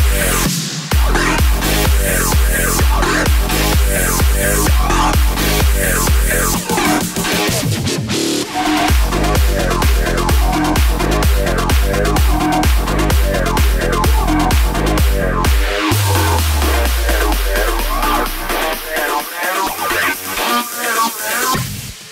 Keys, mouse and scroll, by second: 0.7 space, 2.3-3.5 drag, 4.1 KP_0, 5.7 click, 6.6-7.1 scroll down 1, 7.1-8.0 scroll up 1, 8.0 z, 9.2 space, 21.3 space.